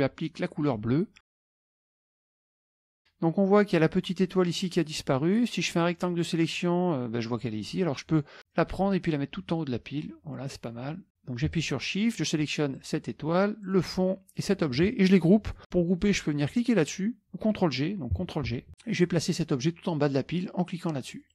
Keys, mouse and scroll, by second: 1.5 click, 1.7 click, 2.2 click, 5.7 click, 8.6-10.4 drag, 12.8 shift+click, 13.7 shift+click, 14.4 shift+click, 18.6 ctrl+g, 21.1 click.